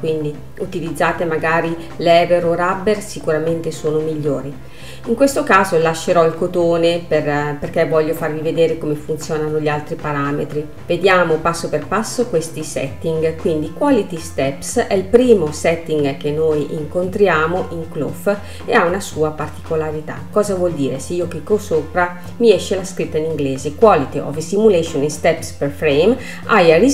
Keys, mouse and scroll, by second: 5.7-8.7 drag, 10.8 scroll down 1, 11.0-11.4 scroll up 3.